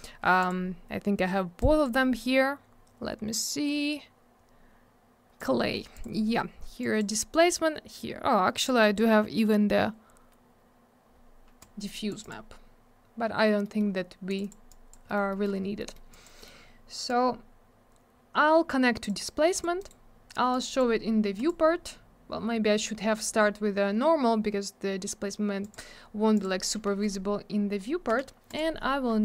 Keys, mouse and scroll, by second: 0.4 click, 0.5 click, 1.6 click, 5.4 click, 5.5 click, 6.0 click, 6.0 click, 6.8 click, 7.0 click, 8.6 click, 8.7 click, 11.6 click, 12.2 click, 12.3 click, 13.6 middle click, 13.8 middle click, 13.9-14.3 scroll up 1, 14.3 click, 14.4 click, 14.4 click, 14.5 double click, 14.7 click, 15.1 middle click, 15.2 middle click, 15.3 middle click, 15.4 double middle click, 15.6 scroll down 1, 15.8 middle click, 15.9 middle click, 16.1 click, 16.2 double click, 16.4 scroll up 1, 16.5 middle click, 17.1 click, 19.5 click, 19.6 click, 19.8 right click, 19.9 double right click, 20.5 click, 20.6 click, 20.7 click, 20.8 double click, 21.4 click, 21.5 click, 25.6 click, 25.7 click, 26.4 click, 26.4 click, 27.2 scroll up 1, 28.1 F4, 28.5 click.